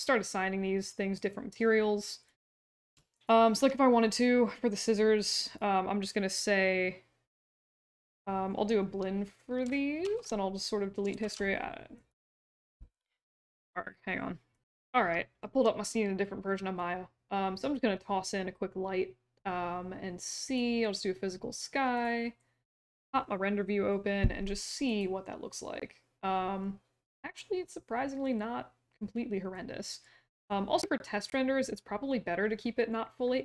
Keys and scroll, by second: 10.0 alt+shift+d, 11.2 alt+shift+d.